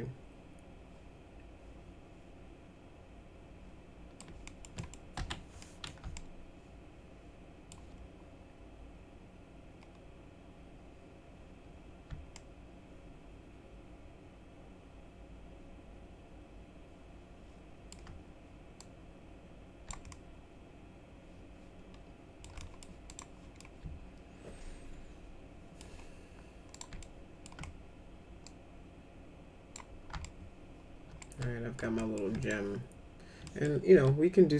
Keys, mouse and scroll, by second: 4.4 middle click, 4.7 middle click, 5.1 F4, 5.6 middle click, 6.1-7.6 alt+middle drag, 12.3-17.9 alt+middle drag, 18.8-19.8 drag, 20.1-22.4 alt+middle drag, 22.6 middle click, 23.0 click, 23.5-25.7 alt+middle drag, 26.7 click, 27.0 alt+middle click, 28.4-29.7 drag, 30.2 alt+middle click, 31.4 alt+middle click, 31.9 alt+middle click, 32.4 click, 33.4 middle click, 33.9 m.